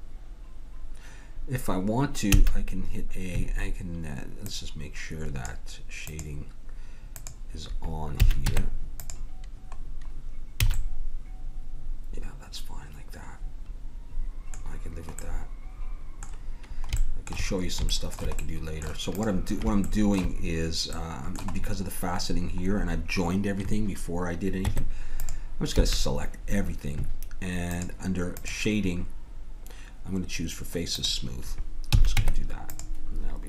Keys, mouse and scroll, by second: 2.4 a, 4.4-9.0 drag, 8.2 a, 8.5 Tab, 10.7 a, 14.7-19.2 middle drag, 19.2 right click, 19.8-21.2 drag, 21.2-24.1 middle drag, 24.7 Tab, 25.7 a, 27.7-30.2 drag, 30.9-32.2 drag, 31.9 a, 32.2 Tab.